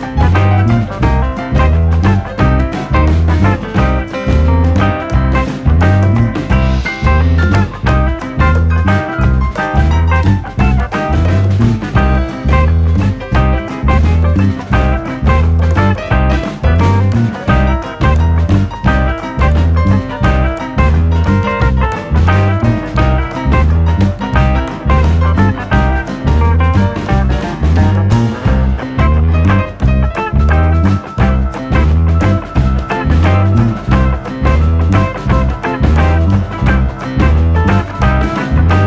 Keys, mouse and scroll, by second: 0.3 shift+middle click, 0.5-1.8 drag, 1.8 e, 4.6 e, 5.1 click, 5.6 click, 6.2 click, 6.8 click, 7.4 click, 7.9 e, 8.6 click, 9.3-10.7 drag, 12.4 shift+middle click, 12.8 click, 13.4 shift+middle click, 13.7 e, 14.4 ctrl+r, 15.7 click, 16.3 click, 17.3-17.6 scroll down 2, 17.4 alt+/, 17.6 middle click, 18.4 KP_1, 18.6-19.4 scroll up 5, 19.4 alt+/, 19.8 click, 20.5-21.7 drag, 21.7 ctrl+z, 22.0 click, 22.6 Delete, 23.1 click, 23.3 scroll down 3, 23.4 middle click, 23.6 alt+/, 23.7 scroll up 2, 23.8 middle click, 24.9 scroll down 1, 25.2 Tab, 25.4 click, 26.0 /, 26.3-26.9 scroll down 16, 26.9 click, 27.3 g, 28.1 scroll up 2, 28.3 shift+middle click, 28.6 KP_Decimal, 28.9 scroll down 2, 29.1 s, 30.1 r, 32.0 r, 33.4 s, 35.0 KP_7, 35.4 drag, 36.5-37.4 scroll up 2, 36.7 shift+middle drag, 37.4 click, 37.9 KP_1, 38.1 KP_3, 38.7 shift+middle click, 38.8 alt+/.